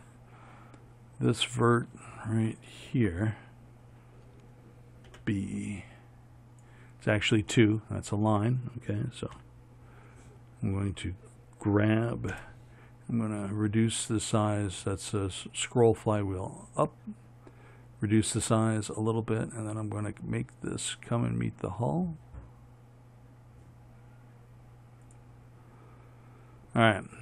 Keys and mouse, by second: 5.3 b, 9.6 KP_1, 12.6 g.